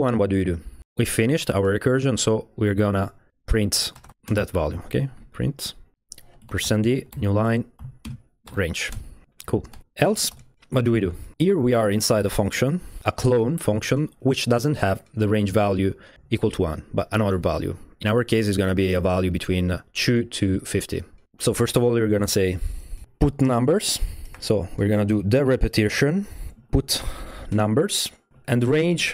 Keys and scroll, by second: 3.6-8.5 typing, 8.9 Return, 9.7 Escape, 9.8-11.8 typing, 12.5 Tab, 12.7 Tab, 23.0 typing, 24.1-25.0 typing, 26.5-29.1 typing.